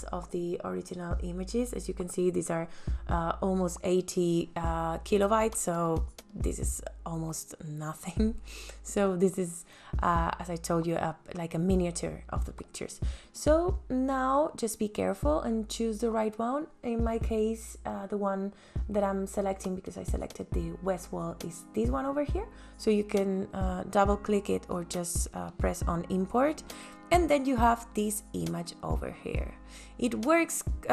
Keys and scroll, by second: 5.7 Delete.